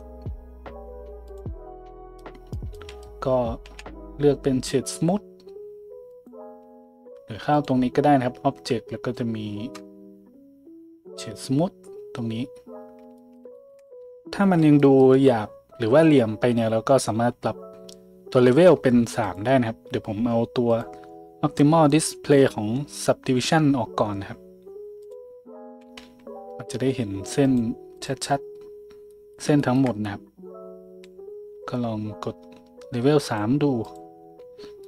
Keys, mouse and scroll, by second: 3.6 w, 25.1-27.4 middle drag, 26.0 z, 27.4 click, 27.5 middle click, 27.9 click, 28.0-33.4 middle drag, 33.4-34.8 drag.